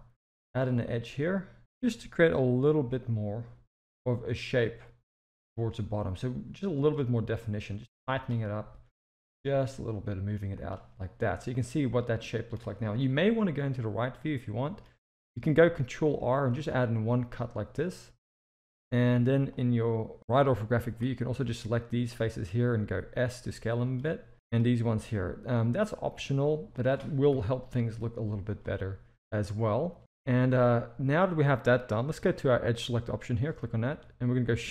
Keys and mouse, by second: 1.6 g, 7.8 click, 9.1 g, 11.5 middle click, 13.1 KP_3, 14.5 shift+middle click, 16.4 ctrl+r, 18.6 z, 19.6-20.9 drag, 22.8 s, 24.3 click, 24.9 s, 27.3 KP_1, 28.2 z, 29.3-30.0 middle drag, 30.5 alt+a, 32.8 click.